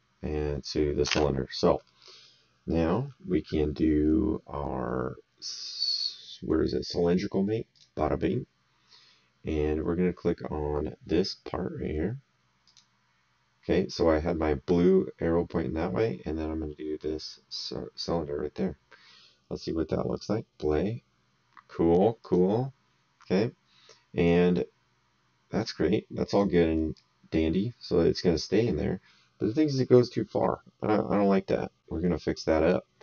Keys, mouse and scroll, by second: 1.1 alt+Tab, 1.8 middle click, 7.7 click, 12.6 click, 17.5 click, 20.1 click, 22.2 click, 25.5 click.